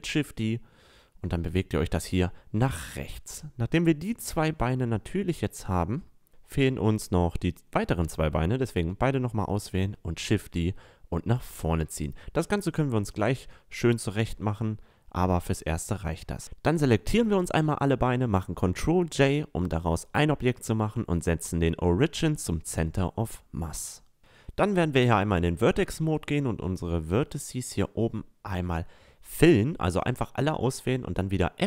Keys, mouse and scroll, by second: 1.8-2.6 middle drag, 4.1-7.0 drag, 7.0 middle drag, 7.8 shift+d, 11.3 a, 11.6-12.0 middle drag, 14.0-16.0 right drag, 16.0 ctrl+j, 16.4 a, 16.7 right click, 20.0 click, 20.5 click, 20.8 a, 21.8 Tab, 26.7 middle click, 28.1 f, 31.6 right click.